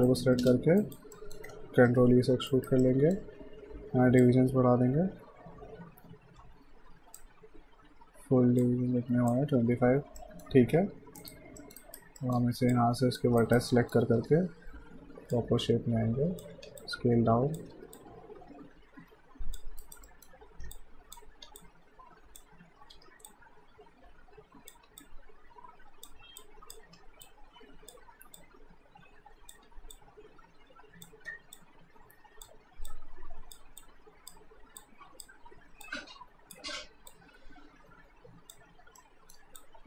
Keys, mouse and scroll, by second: 0.1 alt+right click, 0.4 space, 0.8 alt+right click, 1.2 alt+middle click, 2.0 e, 2.5 alt+right click, 2.8 alt+middle click, 4.2 click, 10.2 middle click, 10.8 q, 11.2 right click, 11.6 middle click, 11.8 right click, 12.2 middle click, 12.7 click, 13.4 right click, 13.7 middle click, 14.1 w, 15.3 click, 16.5 r, 16.8 click, 17.7 w, 18.0 click, 19.9 alt+right click, 20.1 alt+middle click, 20.8 click, 21.4 r, 21.6 click, 22.9 w, 23.3 click, 24.8 r, 25.0 click, 26.8 r, 27.2 click, 28.0 w, 28.4 click, 29.5 r, 29.9 click, 31.3 w, 31.6 click, 32.5 r, 32.9 click, 35.5 r, 35.8 click, 36.8 w, 37.1 click, 39.0 alt+middle click, 39.6 click.